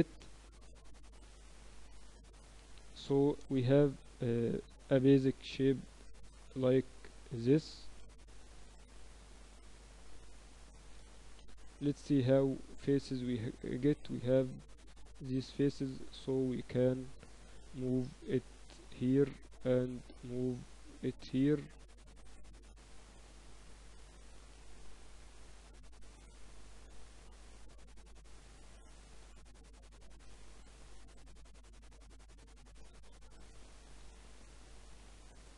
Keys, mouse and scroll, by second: 0.2 g, 1.7-3.1 right drag, 3.5 middle click, 4.2 z, 4.4 Tab, 4.9 Tab, 7.9 ctrl+r, 12.0 Tab, 14.8 Tab, 15.6 ctrl+r, 16.2 click, 17.2-19.0 right drag, 18.2 g, 19.8-21.6 right drag, 20.0 g, 21.6-23.2 middle drag, 23.2 ctrl+r, 24.4-25.5 drag, 25.5-26.5 right drag, 25.5 g, 26.8-29.2 right drag, 26.9 g, 29.3 ctrl+r, 30.1 middle click, 30.4-32.4 right drag, 31.2 g, 32.8 middle click, 33.4 ctrl+r.